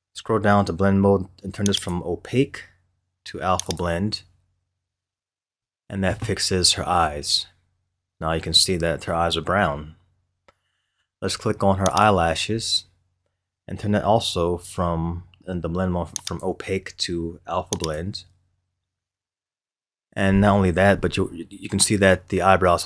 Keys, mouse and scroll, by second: 1.7-4.8 drag, 6.5 scroll up 1, 10.5 scroll down 1, 11.8 click, 16.2-19.4 drag.